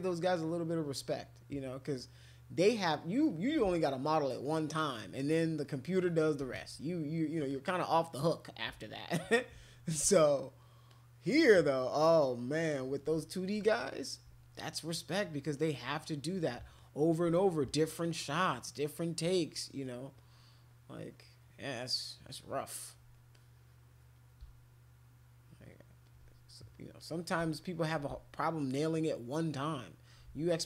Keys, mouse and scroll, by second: 0.3 click, 2.1 alt+click, 2.7 alt+click, 3.0 alt+click, 3.2 alt+click, 3.8 shift+click, 4.0-6.2 shift+drag, 6.5 click, 7.5 click, 10.9-12.6 drag, 13.6 click, 14.8 alt+click, 15.1 alt+click, 15.3 alt+click, 15.5 alt+click, 15.8 alt+click, 16.0 alt+click, 16.2 alt+click, 16.8 click, 17.7 alt+click, 17.9 alt+click, 18.1 alt+click, 18.4 alt+click, 19.0 alt+click, 19.2 alt+click, 19.5 alt+click, 19.7 alt+click, 19.8 alt+click, 20.2 alt+click, 20.4 alt+click, 20.7 alt+click, 21.2 alt+click, 22.0 alt+click, 22.1 alt+click, 22.7 alt+click, 23.3 click, 24.8 alt+click, 25.7 alt+click, 25.8 alt+click, 26.0 alt+click, 26.7 click, 27.4 alt+click, 28.4 alt+click, 28.9 alt+click, 29.1 alt+click, 29.4 alt+click.